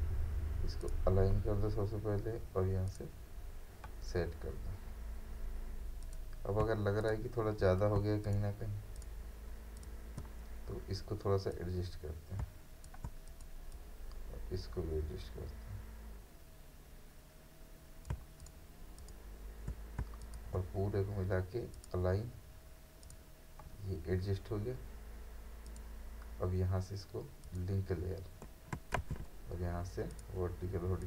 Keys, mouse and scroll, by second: 7.0 shift+click, 8.3-18.4 shift+drag, 20.2 shift+click, 25.1 click, 25.7 click, 29.0 ctrl+a, 30.1 click.